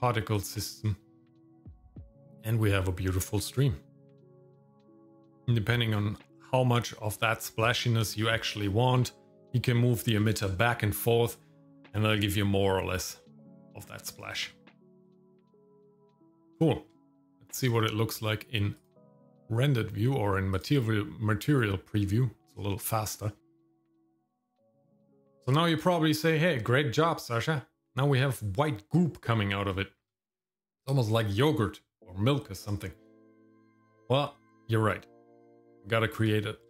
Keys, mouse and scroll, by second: 0.3 click, 1.1-1.6 scroll down 2, 1.3 shift+middle click, 1.4 middle click, 1.7 shift+middle click, 1.9 scroll up 1, 2.0 shift+middle click, 4.9 shift+middle click, 5.1-5.9 scroll up 2, 5.2 shift+middle click, 5.9 scroll down 1, 6.3 middle click, 7.7 shift+middle click, 8.8 shift+middle click, 9.8 shift+middle click, 13.0-13.4 scroll down 2, 13.4 middle click, 13.8 scroll down 1, 14.2 shift+middle click, 14.7 middle click, 15.1 shift+middle click, 15.9 shift+middle click, 16.8 shift+middle click, 19.2 click, 21.9 click, 23.4 middle click, 29.9 shift+middle click, 31.3 middle click, 36.4 shift+middle click.